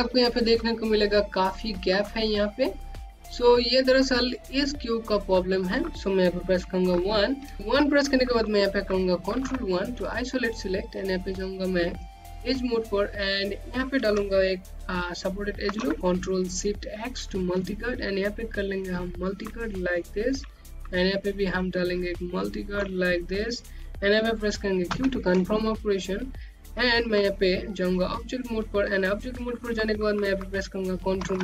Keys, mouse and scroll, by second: 0.1 scroll up 1, 0.4 alt+click, 2.6 alt+click, 5.0 click, 5.6 scroll down 1, 5.9 click, 7.5 1, 7.6 click, 9.9 ctrl+1, 10.9 scroll down 1, 11.6 right click, 11.9 Home, 17.8 ctrl+Num_Lock, 18.0 ctrl+click, 18.2 Home, 21.6 ctrl+middle click, 22.9 Home, 25.4 q, 26.3 scroll down 1, 28.2 right click.